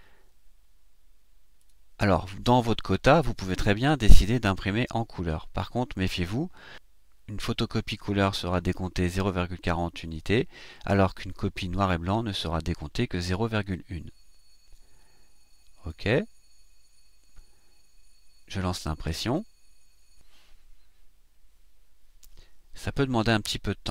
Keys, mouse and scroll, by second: 1.6 click, 15.9 click, 19.2 click.